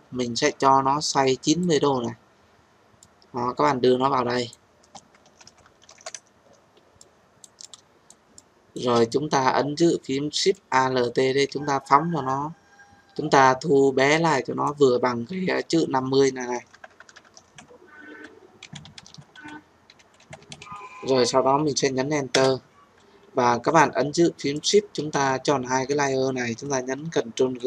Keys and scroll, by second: 22.3 Return, 27.4 ctrl+g.